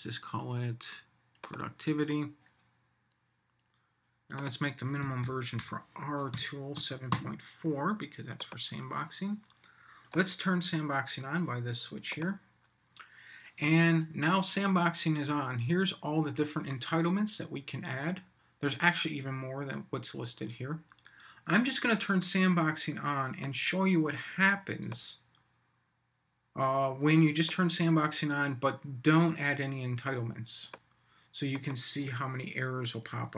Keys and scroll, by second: 33.2 super+s.